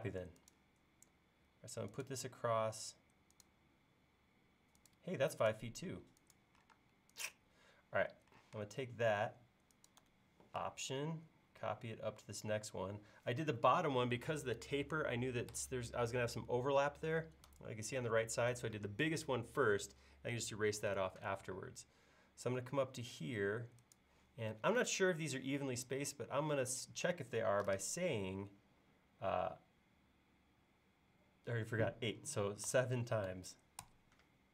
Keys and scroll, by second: 6.8 space, 8.4 m, 32.7-33.3 typing.